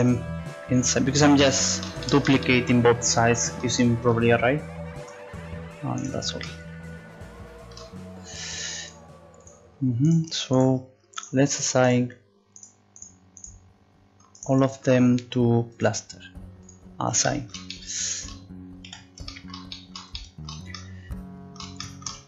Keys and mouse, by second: 2.4-3.5 middle drag, 4.1 middle click, 5.0 z, 6.4-7.9 middle drag, 12.0-14.1 right drag, 16.7-18.9 drag, 17.3 right click.